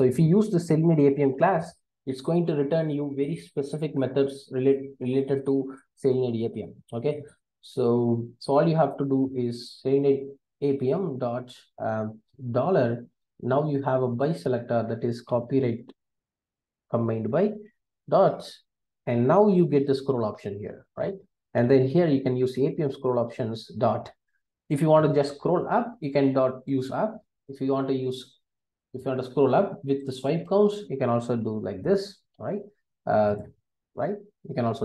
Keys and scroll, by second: 0.0 Return, 16.6 Return, 21.0 Return.